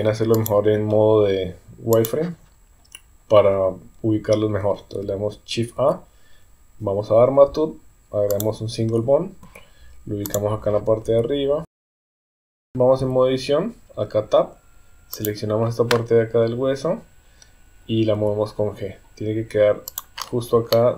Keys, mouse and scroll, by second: 0.4 click, 2.0 click, 5.8 shift+a, 9.4 g, 11.1-12.6 typing, 12.9 Tab, 15.1 click, 18.1 g, 20.7 shift+middle click.